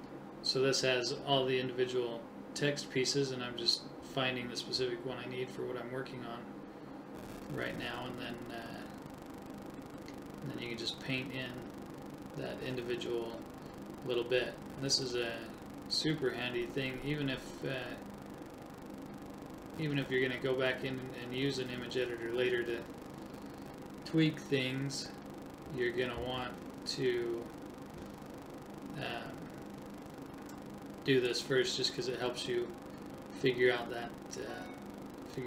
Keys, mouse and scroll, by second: 2.1 right click, 3.2-4.2 right drag, 11.8 click, 12.1-12.4 [, 12.6 [, 12.9 [, 17.1 click, 17.3 right click, 21.3 right click, 27.1 right click, 30.0-32.2 drag, 32.2 right click, 34.1-35.4 drag.